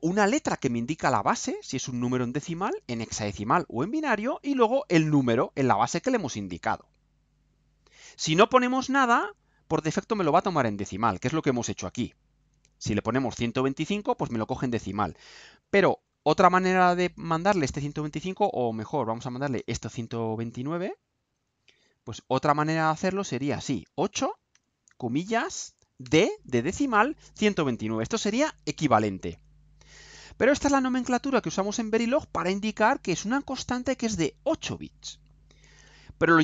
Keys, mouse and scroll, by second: 9.6 click, 15.9 Left, 18.2 Right, 19.2 BackSpace, 19.6 9, 21.0 click, 22.3 click, 23.3 Left, 24.5 8, 25.6 ', 26.0 d, 28.5 ctrl+u.